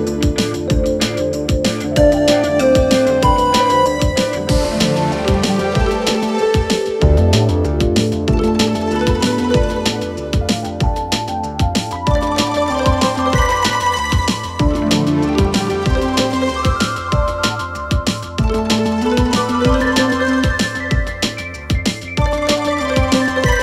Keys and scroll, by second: 2.9 3, 7.1 ], 7.4 Delete, 8.0 4, 11.8 3, 16.1 ].